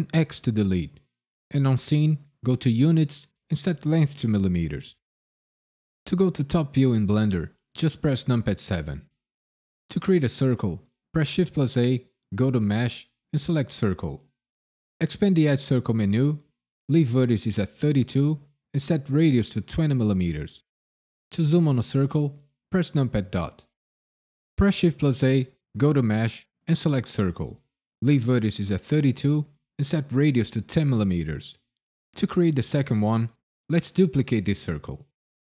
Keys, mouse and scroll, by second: 0.1 x, 2.7 click, 3.6 click, 8.2 KP_7, 11.3 shift+a, 15.4 click, 18.1 click, 22.9 KP_Decimal, 24.8 shift+a, 29.2 click.